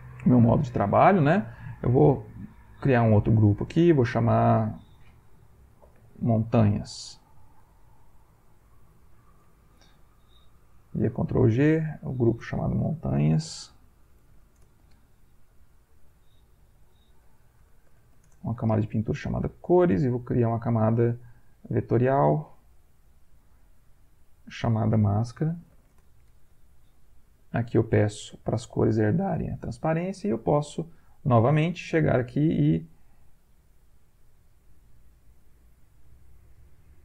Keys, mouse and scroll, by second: 1.5 click, 4.1 click, 5.5-8.9 typing, 9.3 Return, 10.3 ctrl+g, 11.6 click, 12.5-14.8 typing, 15.7 click, 16.8-18.6 typing, 20.6 click, 21.6 click, 23.1 click, 24.2 click, 24.9-25.8 typing, 25.9 shift+Return, 27.5 click, 31.1 click, 32.5 click, 33.2 click, 34.2 click, 35.6 click, 36.3-37.0 drag.